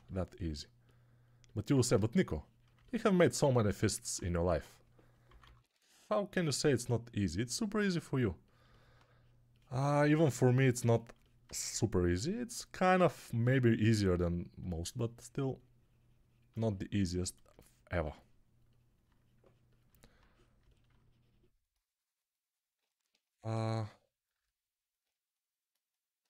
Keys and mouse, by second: 4.4-5.6 typing.